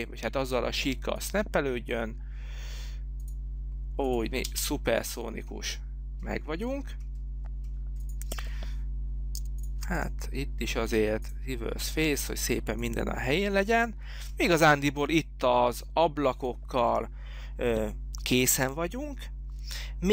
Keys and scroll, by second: 4.8 space.